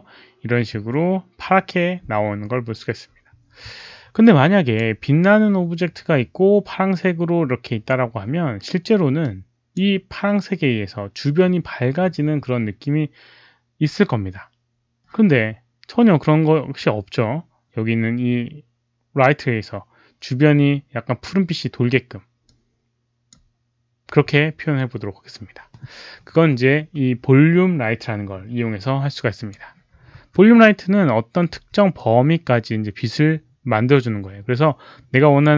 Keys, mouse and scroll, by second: 4.2-4.7 drag, 9.1 click, 22.4 click, 29.3 click, 30.1 r, 31.4 w, 31.9-35.3 drag.